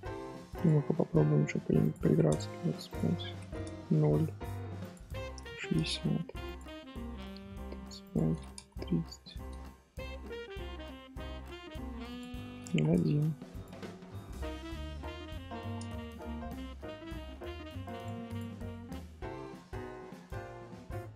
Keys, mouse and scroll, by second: 0.5 click, 1.8-9.4 drag, 9.4 scroll down 1, 10.3 scroll up 1, 12.0-18.3 drag, 18.5 scroll down 1, 18.6-20.7 middle drag, 20.7-21.1 scroll up 3.